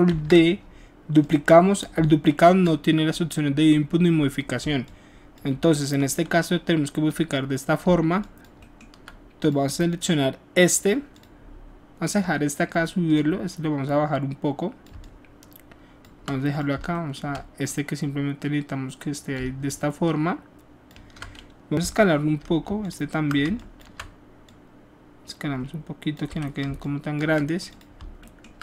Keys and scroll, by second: 0.0 ctrl+d, 21.8 r, 26.3 w.